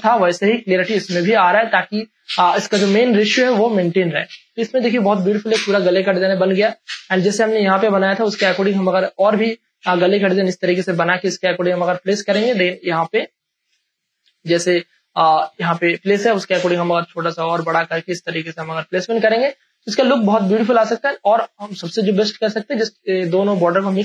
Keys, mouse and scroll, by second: 2.7 ctrl+click, 4.8-7.0 ctrl+drag, 8.4 space, 8.8 ctrl+click, 9.3 v, 11.0-13.7 shift+drag, 13.8 space, 14.7 ctrl+click, 15.4 ctrl+click, 16.5-19.9 drag, 19.9 space, 20.2 click, 20.2 space, 20.5 click, 21.1 space, 21.4 ctrl+click, 22.9 ctrl+click.